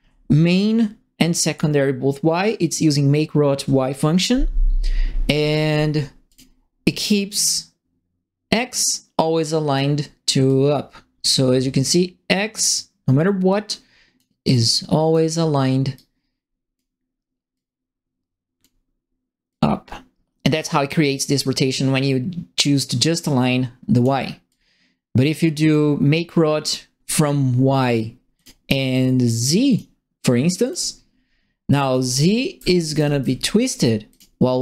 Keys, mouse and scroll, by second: 6.2 click, 7.4-9.7 drag, 10.4-14.1 drag, 14.7 click, 15.9 click, 17.5-18.6 drag, 19.4-24.0 drag, 24.4-25.7 drag, 28.3 click, 29.6 middle click, 30.6 middle click, 31.7-33.1 typing, 31.9-33.2 right drag, 34.1 click.